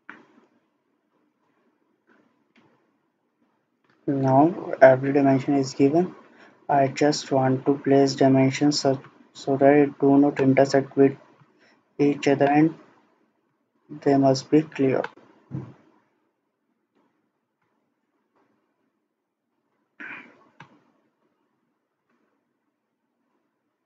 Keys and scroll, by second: 2.5 Escape.